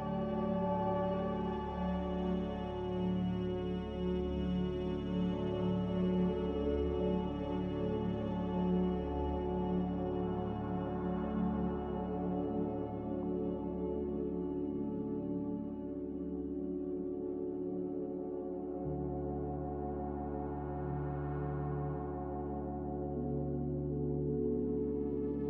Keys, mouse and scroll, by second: 2.9-3.8 typing, 6.7 x, 10.0 m, 15.5-16.2 typing, 19.9-21.6 typing, 23.0 Delete.